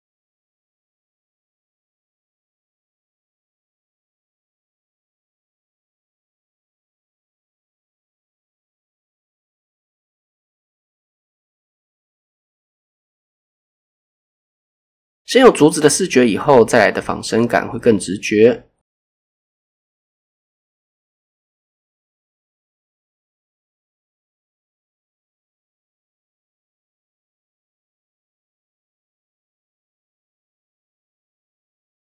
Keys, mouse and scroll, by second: 1.7 click, 2.3 alt+click, 3.3 x, 5.1 ctrl+r, 5.7 click, 5.9 right click, 6.2 s, 8.5 click, 11.0 alt+click, 12.0 s, 14.0 click, 14.4-14.8 scroll down 2, 14.5 Tab, 15.0 shift+middle click, 15.2 shift+scroll down 1, 16.4 shift+middle click, 16.6-17.4 scroll up 5, 16.9 shift+middle drag, 17.4 Tab, 17.7 shift+middle click, 18.2-18.8 scroll up 1, 18.9 alt+click, 20.4-21.5 right drag, 22.7 click, 23.3 alt+click, 23.7 x, 27.3 ctrl+r, 27.9 click, 28.1 right click, 29.1 s, 30.8 click, 31.9 click.